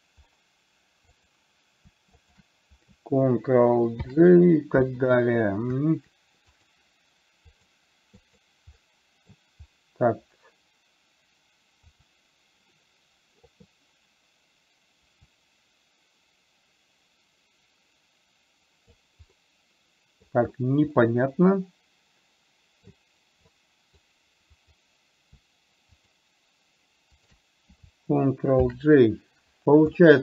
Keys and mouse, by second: 2.5 shift+click, 4.4 ctrl+j, 6.8 click, 7.8 click, 9.0-9.7 middle drag, 15.5-19.3 drag, 19.7-20.7 middle drag, 21.3-23.3 middle drag, 23.9-24.3 middle drag, 24.9 click, 26.4 shift+click, 27.5 shift+click, 29.0 ctrl+j.